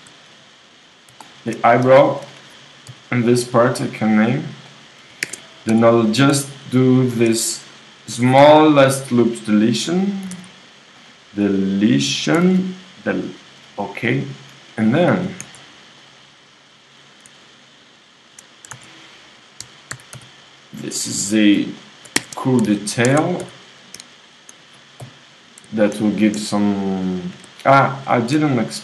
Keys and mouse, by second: 0.0-1.8 drag, 1.8 middle click, 2.0 click, 2.9 i, 5.2 ctrl+Tab, 6.1-8.7 drag, 8.1 x, 10.3 s, 11.9-13.7 drag, 12.4 s, 13.7 middle click, 14.5-16.3 drag, 15.2 g, 16.3 middle click, 17.0-18.6 drag, 19.3 s, 19.9 a, 20.2 c, 22.6 w, 23.1 ctrl+Tab, 25.0 j.